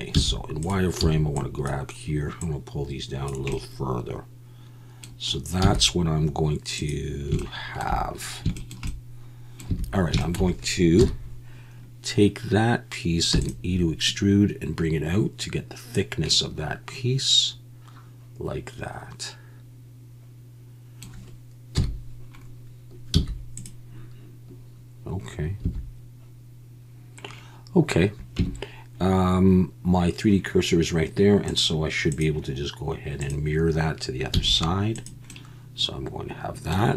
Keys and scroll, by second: 0.1 z, 1.0 b, 5.6 z, 9.7 a, 11.0 KP_1, 13.3 e, 21.8 KP_1, 23.1 z, 25.6 a, 28.4 Tab, 34.3 z.